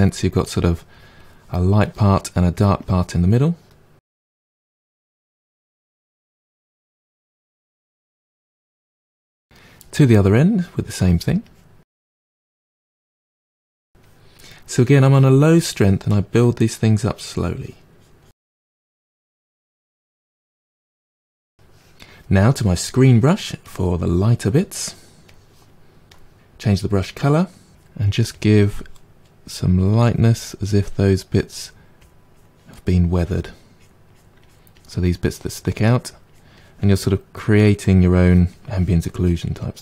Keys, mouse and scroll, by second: 0.3-1.5 drag, 1.5 middle click, 2.2-4.0 drag, 4.3 click, 4.5 middle click, 5.0 click, 5.7 middle click, 6.3-9.5 drag, 9.5-11.5 middle drag, 11.5 click, 12.2 middle click, 12.5 click, 13.4 middle click, 13.9-15.2 drag, 15.2 middle click, 15.6-17.0 drag, 17.0 middle click, 17.5-18.6 drag, 18.6 middle click, 19.4 click, 19.7 middle click, 20.0-23.0 drag, 25.3-28.5 drag, 28.5 middle click, 29.0 click, 29.5 middle click, 30.4 f, 30.7 click, 31.6 middle click, 32.1-33.6 drag, 33.6 middle click, 34.1-35.9 drag, 35.9 middle click, 36.6 click, 37.0 middle click, 37.5 click, 38.2 middle click, 38.8-39.8 drag.